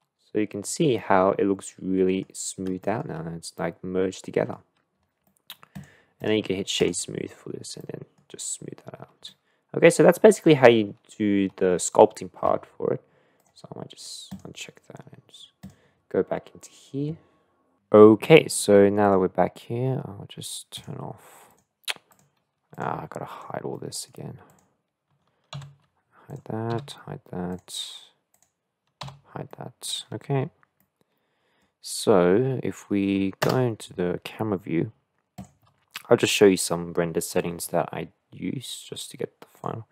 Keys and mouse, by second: 1.0-2.2 middle drag, 2.9 shift+middle click, 3.6-4.5 middle drag, 5.3 middle click, 5.7 click, 6.3-7.0 drag, 7.4 click, 7.8 middle click, 9.3-10.2 middle drag, 14.3-17.7 drag, 19.0 click, 21.5 click, 22.7 click, 23.3 click, 23.7-24.1 middle drag, 24.5-25.6 drag, 25.6 h, 26.3 click, 26.7 h, 28.3 click, 29.0 h, 29.5-29.8 middle drag, 30.8-31.6 middle drag, 33.4 KP_0, 39.6 click.